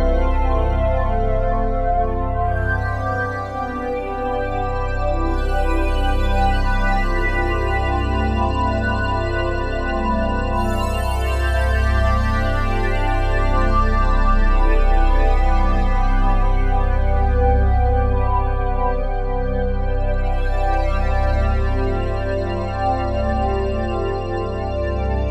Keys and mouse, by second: 1.9-3.2 drag, 3.3 click, 5.0-5.4 ctrl+alt+drag, 5.7 ctrl+alt+drag, 6.2-7.2 alt+shift+drag, 7.2-11.0 ctrl+alt+drag, 11.9 click, 12.5 click, 13.4 click, 13.9 click, 14.8-18.1 shift+drag, 18.3 click, 18.5 click, 18.5-20.9 typing, 21.2 Return.